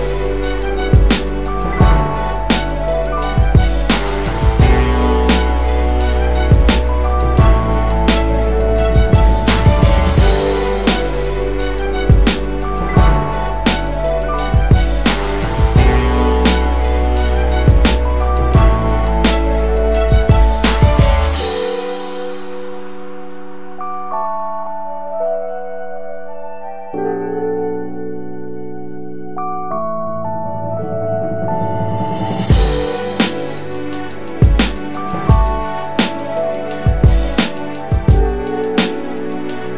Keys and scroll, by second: 12.8 alt+w, 14.9 alt+w, 16.5 ctrl+0, 17.0 ctrl+-, 17.3 ctrl+-, 20.6 w, 22.7 w, 24.7 space.